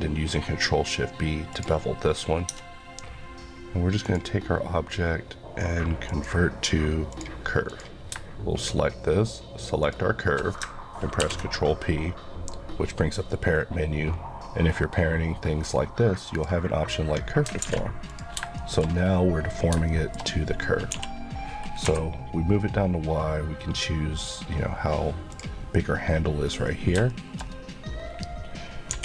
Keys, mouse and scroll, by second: 1.5 click, 2.5 click, 11.2 ctrl+p, 16.3 click, 17.6 alt+a, 18.1 click, 18.6 shift+middle click, 18.9 scroll up 1, 19.4-19.8 scroll down 2, 19.9 shift+middle click, 20.9 g, 25.3 click, 27.1 shift+middle click, 27.4-28.9 scroll up 1, 28.9 g.